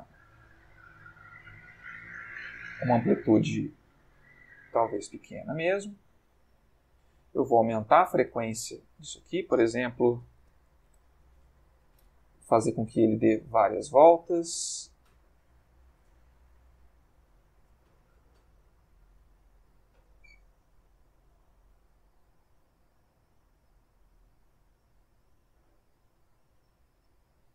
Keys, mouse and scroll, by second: 7.1-8.6 drag, 9.1 ctrl+click, 10.4 5, 10.5 0, 10.9 Return, 12.9 click, 13.6 Escape, 14.0-16.7 drag, 16.2 Escape, 17.2 click, 17.8 Escape, 18.2-21.3 drag, 20.7 Escape, 21.9-27.5 drag.